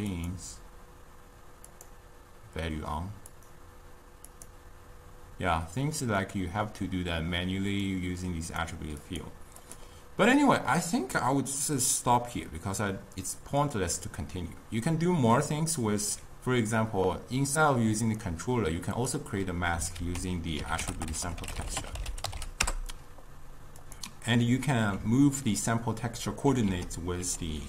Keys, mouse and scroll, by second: 2.5 click, 4.2 click, 5.1-6.3 drag, 6.3-8.0 middle drag, 8.0-9.8 drag, 10.5-13.9 middle drag, 18.1-19.4 drag, 20.0 ctrl+a, 21.0 t, 26.7 ctrl+a.